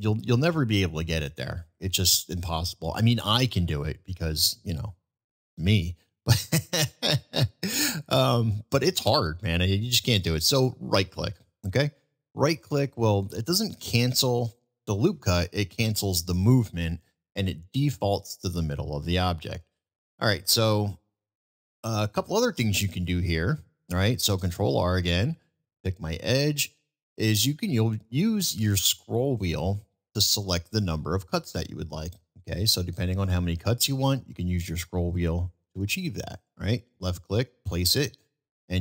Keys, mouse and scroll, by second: 12.2 middle click, 13.5-14.6 middle drag, 15.4-15.9 middle drag, 19.7 ctrl+z, 21.4 ctrl+r, 37.0 click, 37.7-38.1 middle drag.